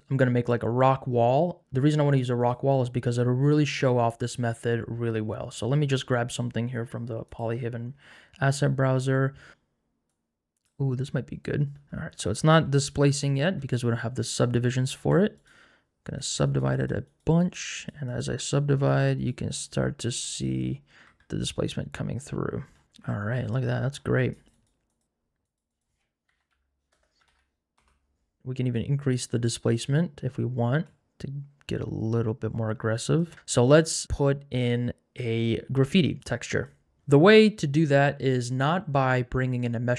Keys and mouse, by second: 2.4 click, 7.3 click, 12.8 shift+middle click, 13.3 middle click, 13.4 Tab, 15.5 right click, 16.5 right click, 17.1 right click, 17.9 right click, 18.4 right click, 19.3 right click, 20.1 right click, 21.1 Tab, 24.7 right click, 25.6-27.8 drag, 30.9-33.2 shift+drag, 34.6 click, 36.2 click, 37.0 n.